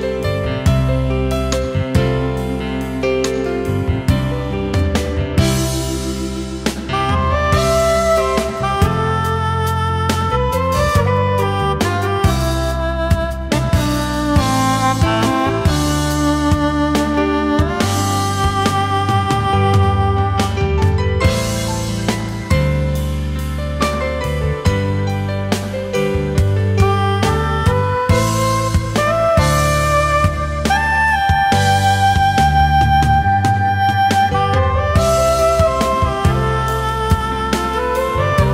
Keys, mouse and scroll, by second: 3.7 space, 9.2 ctrl+shift+a, 9.7 alt+scroll down 1, 10.0 space, 33.4 alt+click, 34.3 ctrl+shift+a, 34.7 alt+scroll down 1, 34.9 space, 37.1 alt+scroll up 1, 37.3 space.